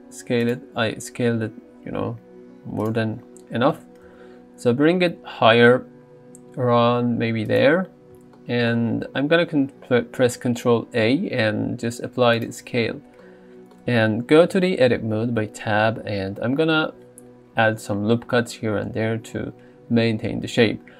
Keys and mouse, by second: 0.4 click, 0.9 s, 3.8 g, 4.1 z, 10.9 ctrl+a, 13.2 shift+middle click, 14.5 Tab.